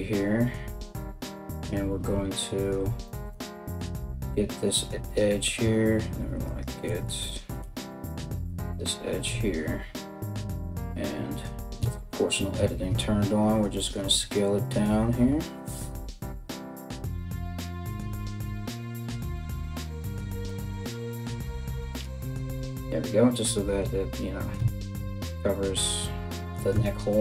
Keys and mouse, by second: 1.1 right click, 3.4 alt+right click, 6.1 alt+shift+right click, 6.7 ctrl+z, 7.7 alt+shift+right click, 8.9 KP_1, 11.4 s, 20.4 z, 21.6 Tab, 24.2 Tab, 25.4 a, 25.6 a, 26.3 Tab.